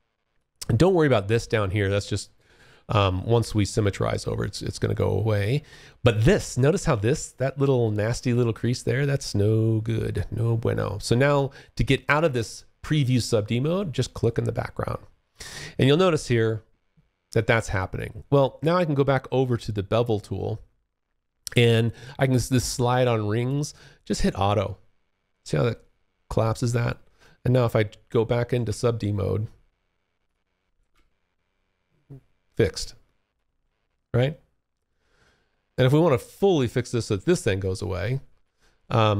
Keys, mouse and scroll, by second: 13.2 click, 15.2 alt+right click, 23.2 click, 27.7 F1, 29.4 click, 29.9 F1, 31.8 alt+right click, 32.8 alt+middle click, 35.0 click, 36.9 alt+click, 37.8 alt+middle click.